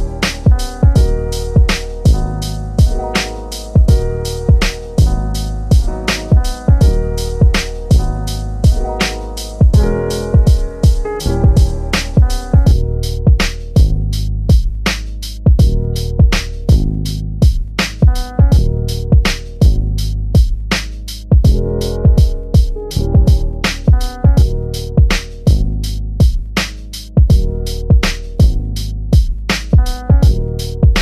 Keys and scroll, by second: 14.7 3.